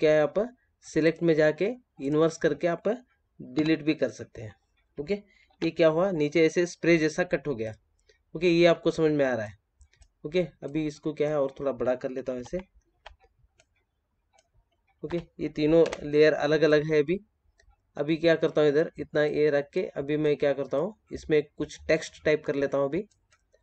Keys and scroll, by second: 3.5 Delete, 5.5 ctrl+d, 12.2 ctrl+t.